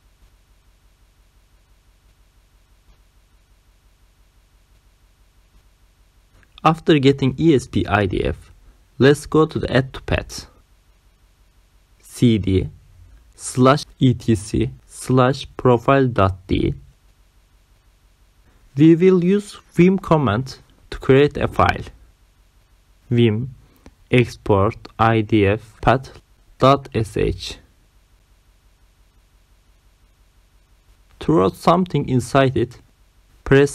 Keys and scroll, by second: 11.9-16.5 typing, 16.9 Return, 20.3-22.8 typing, 23.9-25.1 typing, 26.2-28.1 typing, 29.3 Return, 33.1-33.7 typing.